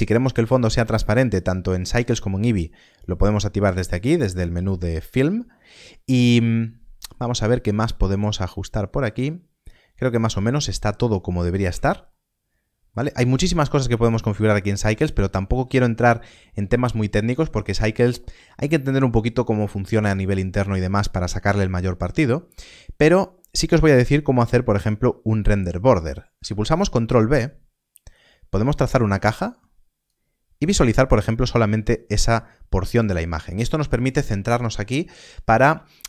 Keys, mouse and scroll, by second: 0.2 middle click, 3.9 click, 6.3 middle click, 11.6 middle click, 13.2 scroll down 1, 14.2 shift+middle click, 26.6 ctrl+b.